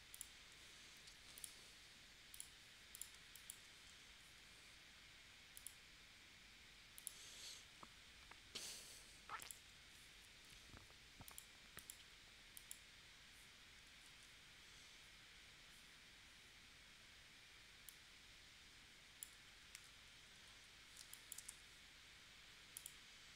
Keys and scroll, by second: 3.1 space, 14.0 shift+w, 19.7 super+z, 21.0 space, 21.5 v.